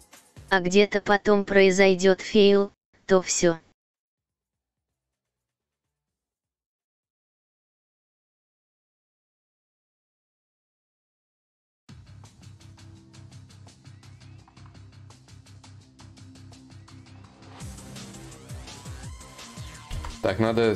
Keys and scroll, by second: 7.3 ctrl+z, 16.0-17.8 typing, 19.5 ctrl+z, 19.5 y.